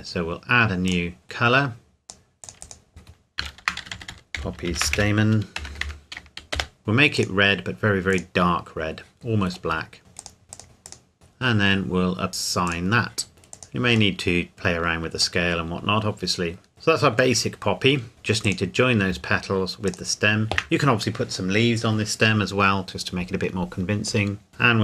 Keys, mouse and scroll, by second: 0.0-0.9 scroll down 1, 0.9 click, 3.6-5.8 typing, 6.5 Return, 6.8 click, 9.2 scroll down 1, 9.5 scroll up 1, 9.8-10.2 scroll down 1, 10.2 click, 11.2-12.7 scroll up 1, 12.7 click, 13.3 s, 13.5 click, 14.2 middle click, 14.5 scroll down 1, 15.4 middle click, 16.7-17.4 scroll down 1, 17.4 middle click, 18.1 shift+click.